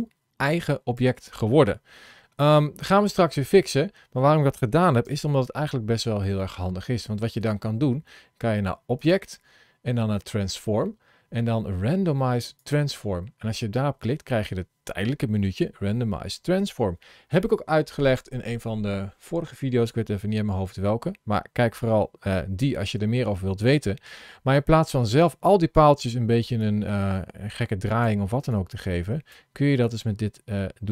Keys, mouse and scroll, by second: 3.4 middle click, 4.9 Tab, 6.3 middle click, 8.8 click, 26.4 click, 28.5 click, 29.8 click.